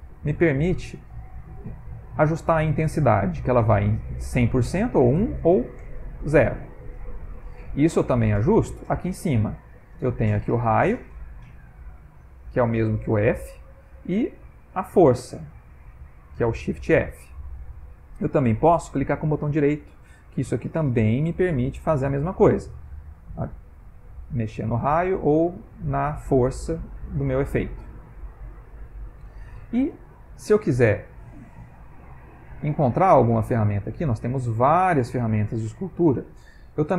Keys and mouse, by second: 10.4 click, 13.2 click, 14.4 click, 19.5 right click, 27.6 click, 33.1 middle click, 33.6 middle click.